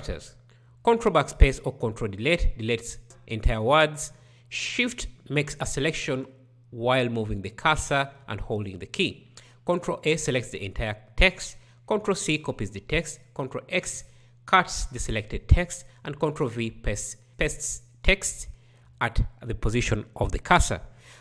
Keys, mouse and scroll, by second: 0.8 ctrl+Delete, 8.2 ctrl+a, 11.8 ctrl+c, 14.1 ctrl+v, 17.3 ctrl+x.